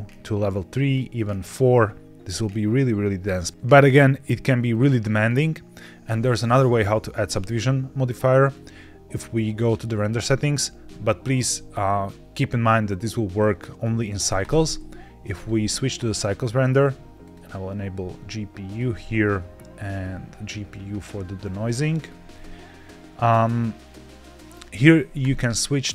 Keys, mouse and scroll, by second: 0.7 click, 3.2 scroll up 3, 4.6 click, 6.3-6.7 scroll down 1, 8.3-9.3 drag, 9.3 click, 14.3-15.5 drag, 16.6-17.3 drag, 18.6 click, 18.8-19.8 scroll down 2, 19.8 click, 21.3 drag, 22.2-24.9 scroll up 2, 25.1-25.9 drag.